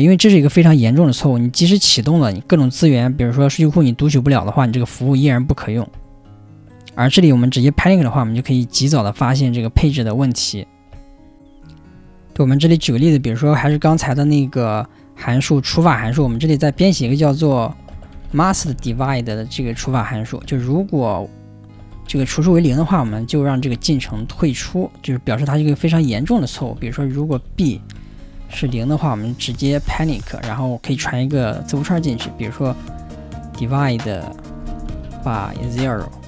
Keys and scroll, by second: 23.7 4.